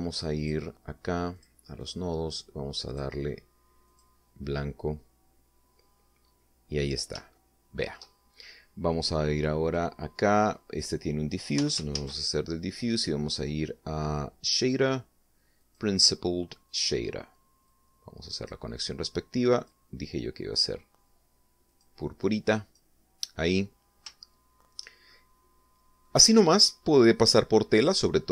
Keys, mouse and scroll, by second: 1.3 click, 2.3 click, 2.8 click, 3.8 click, 4.8 click, 7.3-7.6 scroll up 2, 8.3 shift+middle click, 10.6 click, 11.7 click, 12.5 x, 12.9 shift+a, 16.6 click, 17.7 click, 18.6 click, 20.5 click, 22.6 click, 23.2 click, 25.2 shift+middle click, 26.1-27.2 shift+middle drag, 27.4 scroll up 2.